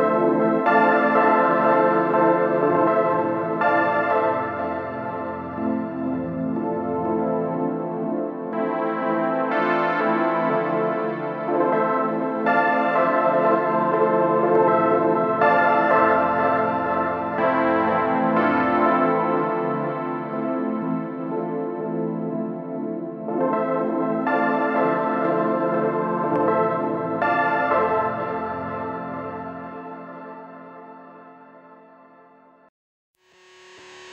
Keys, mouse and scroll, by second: 0.2-0.7 scroll up 2, 0.7 shift+middle click, 1.2-1.8 scroll down 2, 1.8-2.7 shift+middle drag, 2.7-4.8 scroll down 2, 4.8-7.7 middle drag, 7.7 KP_1, 8.0-8.4 scroll up 2, 8.4-9.1 shift+middle drag, 9.1-9.4 scroll up 1, 9.4-10.0 shift+middle drag, 10.0 Tab, 10.4-11.4 scroll down 2, 11.4 click, 13.1 ctrl+shift+click, 13.9 middle click, 14.8-15.2 scroll down 1, 15.2-16.2 shift+middle drag, 16.2 ctrl+shift+click, 17.0-20.1 middle drag, 29.6-30.0 scroll up 2, 30.0 KP_1.